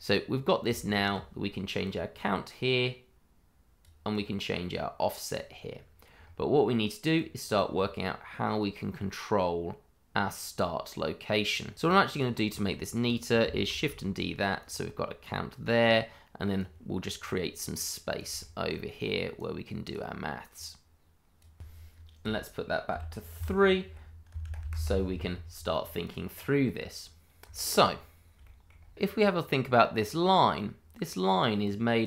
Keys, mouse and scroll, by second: 0.3-0.6 scroll down 1, 0.7 shift+middle click, 1.8 click, 5.7-6.2 scroll down 1, 6.2 scroll up 1, 7.1 click, 11.4-11.7 scroll down 1, 11.8 ctrl+right click, 11.9 right click, 12.0 ctrl+right click, 13.0 click, 13.6 shift+d, 14.5 click, 18.1 click, 18.4 middle click, 18.5 shift+middle click, 19.3 click, 22.9 2, 23.9 Insert, 24.3 BackSpace, 24.6 3, 24.7 Return, 26.0 click, 27.0-27.4 scroll up 1, 27.5 shift+middle click, 27.5 middle click, 27.7 shift+middle click, 28.5 middle click, 28.7 scroll up 1, 29.1 click.